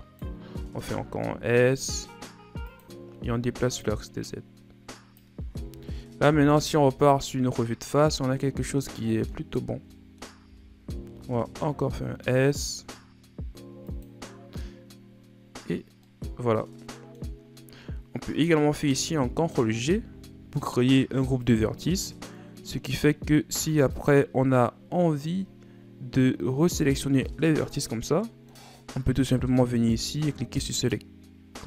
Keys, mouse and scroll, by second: 0.7 s, 3.7-6.2 drag, 6.2 KP_1, 6.8 Tab, 7.6 scroll down 4, 8.4-9.4 middle drag, 9.4 scroll up 1, 9.9-10.4 middle drag, 10.4 Tab, 11.0 s, 15.3 scroll down 2, 16.0-19.0 middle drag, 19.8 ctrl+g, 23.2-23.8 scroll down 5, 23.8 click, 25.1 scroll up 2, 26.6 a, 27.6 middle click, 28.4 scroll up 1, 29.4-30.6 scroll down 3, 30.6-31.6 drag.